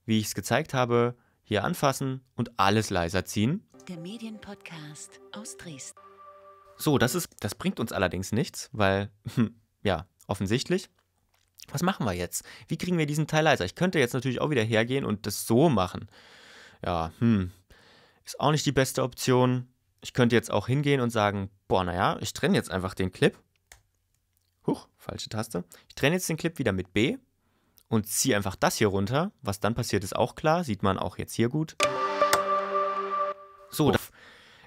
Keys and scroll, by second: 3.7 space, 7.2 space, 20.0 super+y, 25.4 super+y, 26.3 b, 31.7 space, 33.9 space.